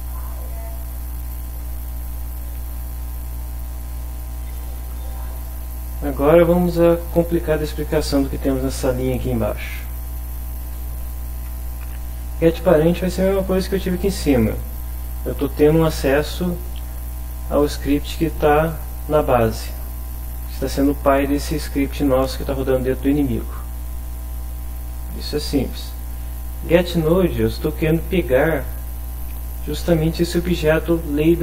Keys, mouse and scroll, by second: 1.3 click, 2.3 click, 3.7 click, 4.4 click, 9.3 Up, 9.6 Right, 10.6 Return, 11.0 Up, 12.6 Up, 14.3 Right, 15.0 Left, 23.9 click, 24.9 click, 26.0 click, 26.7-27.7 drag, 28.0 click, 29.5 click, 31.1 click.